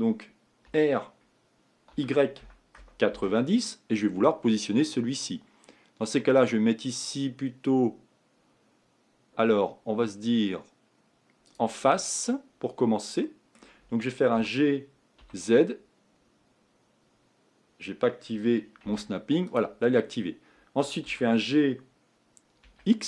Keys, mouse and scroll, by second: 0.8 r, 4.4-8.2 scroll up 4, 8.2-9.5 scroll up 1, 9.5-12.9 scroll up 1, 12.9 scroll down 1, 13.0-14.4 middle drag, 14.4 g, 21.1 g.